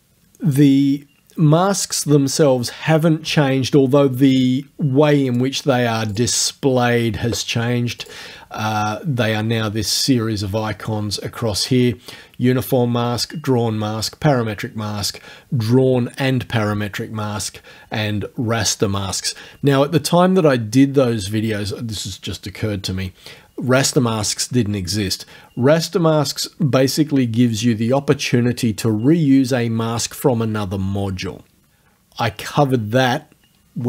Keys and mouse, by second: 5.3 click, 6.1 click, 8.0 click.